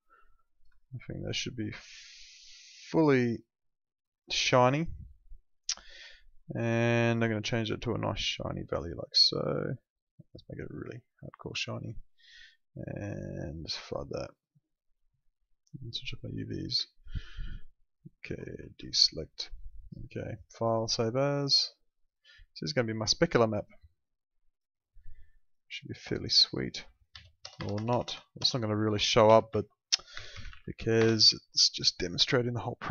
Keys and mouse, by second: 2.4 shift+click, 7.2 click, 13.9 click, 18.8 ctrl+d, 20.8 click, 27.1 Left, 27.4 BackSpace, 28.8-31.0 typing, 32.5 click.